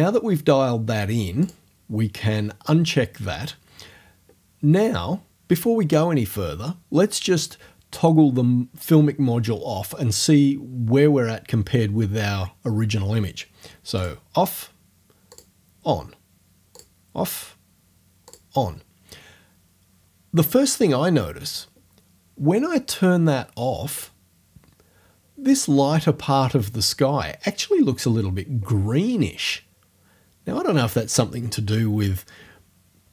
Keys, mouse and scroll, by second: 1.4 click, 14.0 click, 15.3 click, 16.8 click, 18.3 click, 24.0 click.